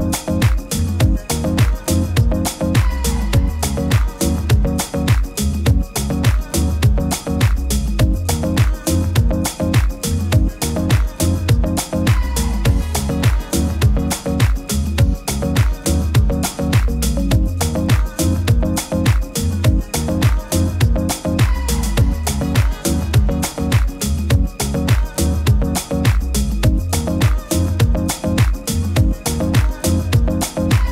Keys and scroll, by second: 1.6 super+-, 1.8 super+-, 19.9 super+-, 20.1 super+-, 20.4 super+-, 22.7 super+=, 23.0 super+-, 25.2 super+=, 25.6 super+=, 25.7 super+=.